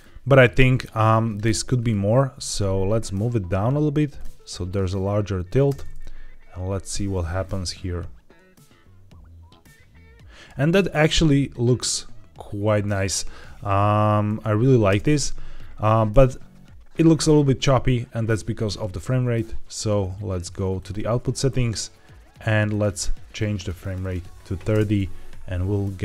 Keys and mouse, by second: 1.1 click, 2.2 g, 2.4 y, 4.6-5.4 drag, 5.6 space, 14.8 space, 20.7 click, 22.6-24.0 drag, 24.6 space.